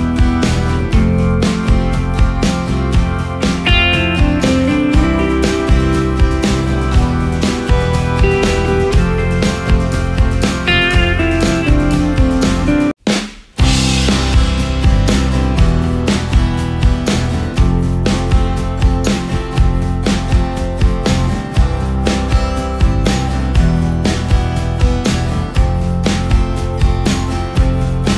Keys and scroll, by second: 0.0 ctrl+space, 4.5 space, 8.7 ctrl+space, 9.3 ctrl+space, 9.9 ctrl+space, 10.8 ctrl+space, 11.4 ctrl+space, 15.7 space, 18.2 ctrl+space, 20.9 ctrl+shift+space, 22.1 ctrl+shift+space, 24.5 ctrl+space.